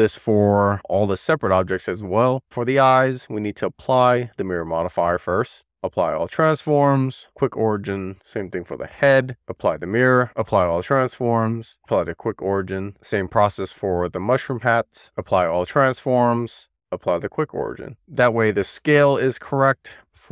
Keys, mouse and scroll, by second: 0.7 click, 5.4 click, 6.0 ctrl+a, 7.3 alt+q, 8.6 click, 10.1 click, 10.4 ctrl+a, 11.9 alt+q, 13.5 ctrl+a, 16.7 alt+a, 17.2 alt+q.